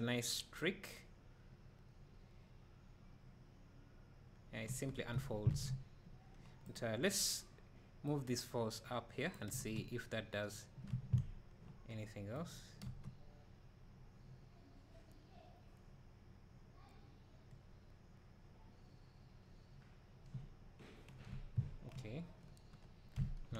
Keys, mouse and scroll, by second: 5.6 Escape, 6.7 click, 8.1-12.3 drag, 9.5 space, 12.5 right click, 12.8 space.